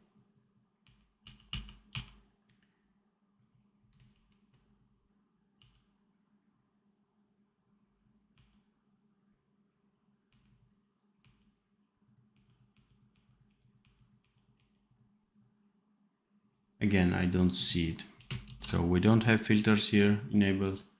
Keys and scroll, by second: 0.8 r, 1.1 f, 1.8 r, 4.0 ctrl+b, 5.5 f, 8.2 r, 10.2 r, 12.3 r, 13.4 r, 14.5 r, 18.4 ctrl+s.